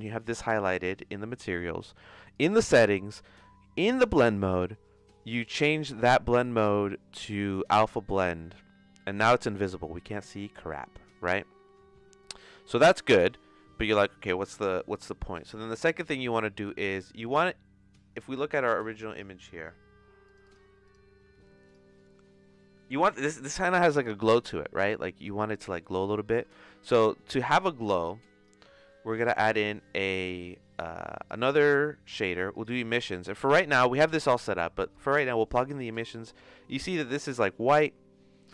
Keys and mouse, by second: 0.4 click, 2.3 click, 2.6 click, 6.5-8.1 drag, 12.2 click, 15.1 middle click, 15.7 click, 20.2 click, 20.9 click, 26.5 space, 26.9 space, 28.9 middle click, 29.2 shift+a, 34.9 click.